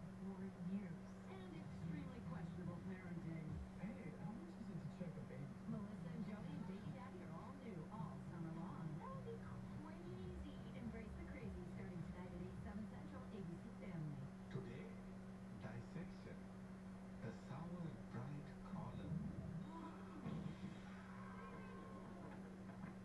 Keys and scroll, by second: 9.6 ..